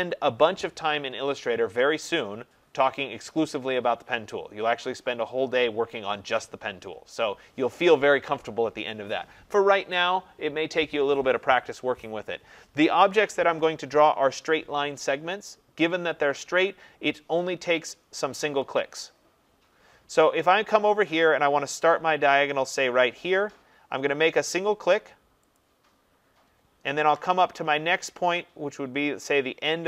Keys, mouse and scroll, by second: 25.6-28.5 drag.